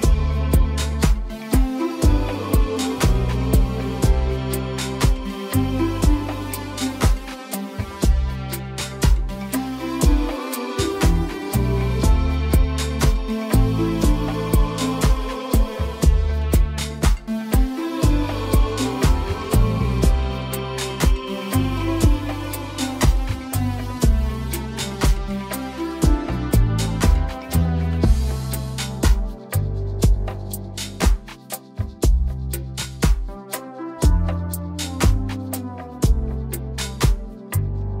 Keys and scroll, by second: 34.5 ctrl+t.